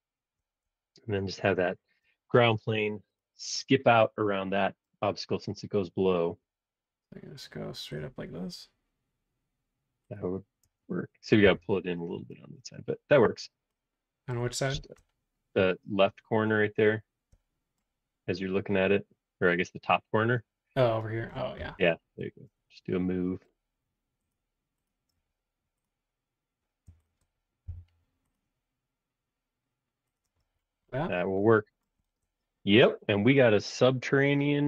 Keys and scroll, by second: 1.5 space, 6.5 r, 10.6 space, 11.4 BackSpace, 27.6 m, 30.2 space.